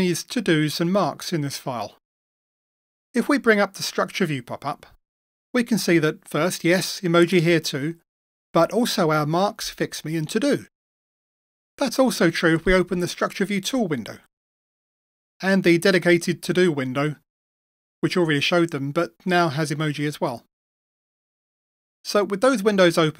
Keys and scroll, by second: 3.5 super+F12, 12.1 super+7, 16.6 super+6.